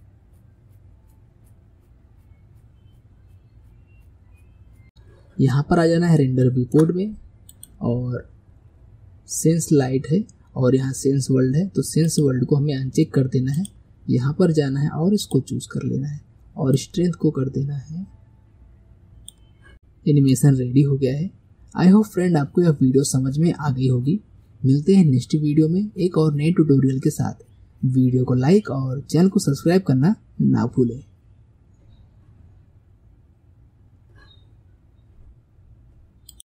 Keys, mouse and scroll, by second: 4.8 click, 5.8-7.5 middle drag, 7.5-10.6 drag, 19.7-36.5 middle drag.